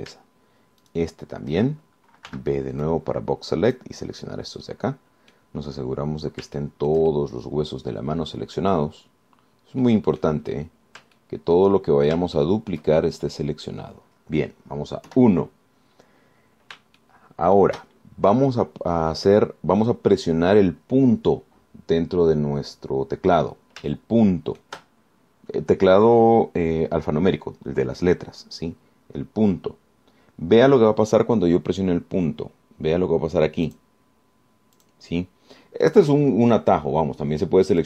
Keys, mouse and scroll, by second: 0.0 shift+right click, 0.8-1.4 shift+scroll down 1, 2.0 shift+right click, 3.5 b, 4.0-5.2 drag, 5.4-6.8 drag, 6.8-7.3 scroll up 1, 7.8-9.8 shift+right drag, 9.8 scroll up 2, 10.0-10.4 scroll down 2, 11.0 right click, 11.6-12.0 scroll up 2, 12.4 shift+right click, 13.1 shift+scroll down 2, 13.6 shift+right click, 14.4 shift+scroll down 3, 16.3 KP_1, 17.0 scroll down 2, 18.2 shift+click, 24.0-24.4 scroll up 2, 25.2 shift+click, 34.9 click, 36.0 click.